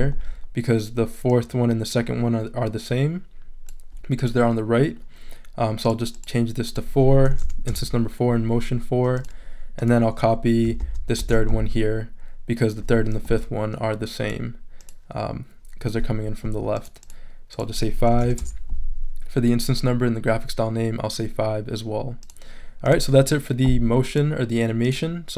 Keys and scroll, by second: 7.3 BackSpace, 7.4 4, 7.7 Return, 10.8 super+c, 11.2 super+v, 18.1 BackSpace, 18.2 5, 18.4 Return.